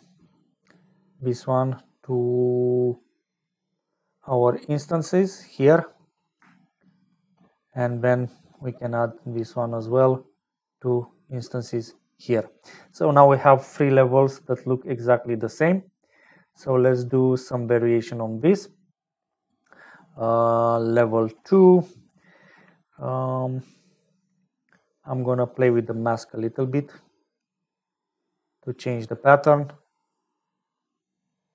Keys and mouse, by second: 0.8-5.7 drag, 5.8 middle click, 6.8 shift+click, 8.4 middle click, 9.8-11.7 drag, 20.3 middle click, 22.2 middle click, 23.1 middle click, 27.8-28.9 drag, 30.1-31.5 drag.